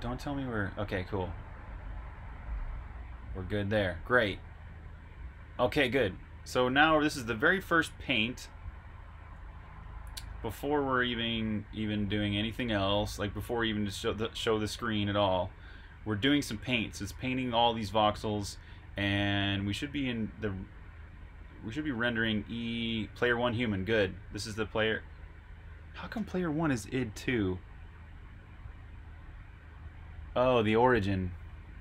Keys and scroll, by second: 7.4 super+Tab, 10.2 super+Tab.